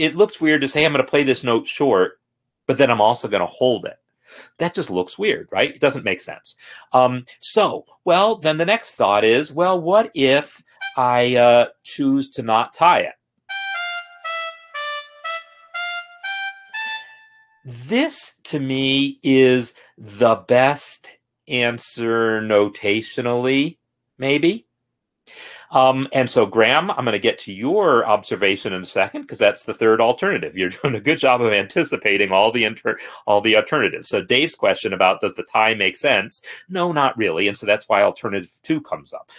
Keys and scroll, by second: 13.4 space, 16.9 space.